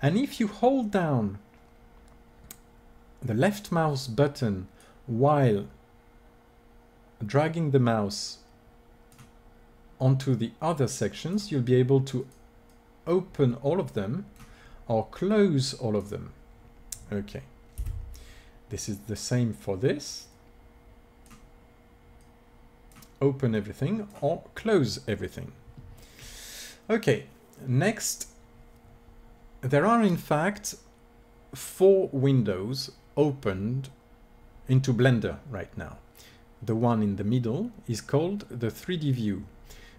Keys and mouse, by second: 5.2-7.0 drag, 10.4-14.4 drag, 15.1-17.1 drag, 17.5 n, 20.1-25.2 drag.